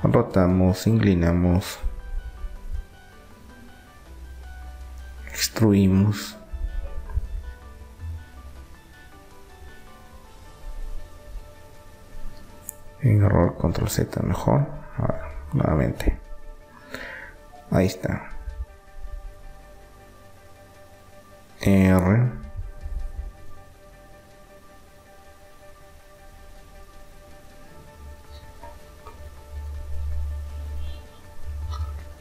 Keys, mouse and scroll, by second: 0.3-2.3 drag, 4.3 e, 9.0 ctrl+z, 10.0 ctrl+z, 13.6-15.3 drag, 16.3 e, 21.8 r, 23.8-25.6 drag, 26.5 r, 29.3-32.0 drag, 32.0 r.